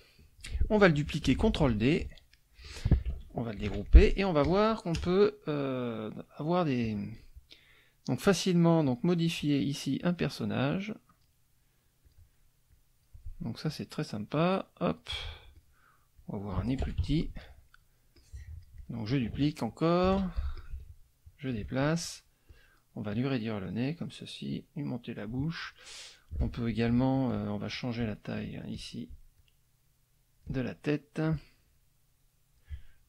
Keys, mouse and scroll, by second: 1.3 ctrl+d, 1.7-2.8 ctrl+drag, 3.6 ctrl+shift+g, 3.8 ctrl+shift+middle click, 4.4 ctrl+shift+click, 5.0 KP_Add, 5.5 middle click, 6.8 click, 7.1 middle click, 8.9 click, 9.2 click, 10.0 click, 10.5 click, 12.0 click, 12.7 click, 13.7 click, 14.3 click, 15.5 click, 16.1 click, 16.8 F1, 17.0 KP_Subtract, 17.5 middle click, 18.2-19.2 drag, 18.8 middle click, 20.1 ctrl+d, 20.6-21.7 ctrl+drag, 21.8 ctrl+click, 22.5 click, 23.1-24.2 drag, 24.5 click, 25.6 click, 27.1 shift+click, 28.6 shift+click, 29.4-30.6 shift+drag, 31.2-32.8 drag.